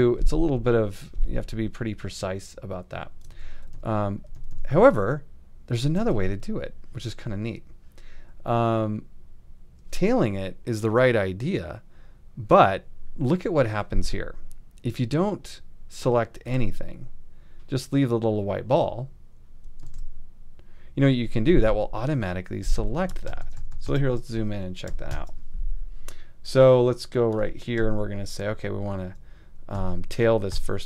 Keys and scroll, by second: 3.3 super+z, 6.0 super+z, 19.9 shift+super+a, 23.2 super+=, 25.1 super+=, 30.5 alt+].